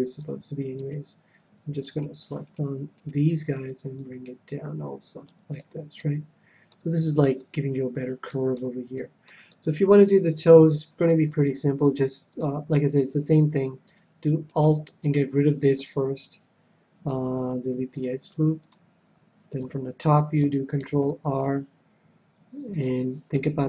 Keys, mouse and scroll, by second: 0.7-4.6 right drag, 3.9-5.6 drag, 5.6 a, 6.0-11.3 middle drag, 10.4 KP_7, 11.5 KP_7, 12.4-14.0 middle drag, 14.5-16.4 right drag, 15.7 x, 19.6 KP_7, 20.8 ctrl+r.